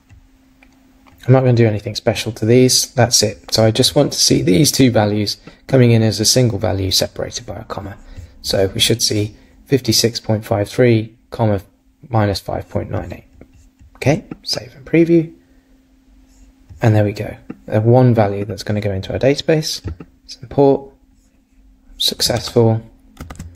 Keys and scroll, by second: 22.4 super+Tab.